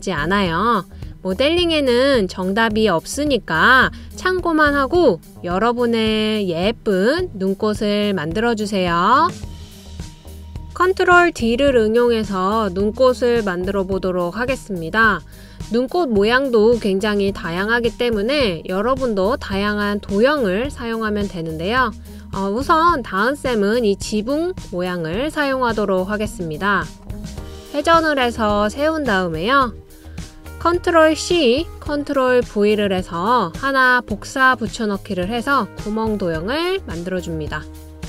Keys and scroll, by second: 29.9 d, 31.4 super+c, 32.0 super+v.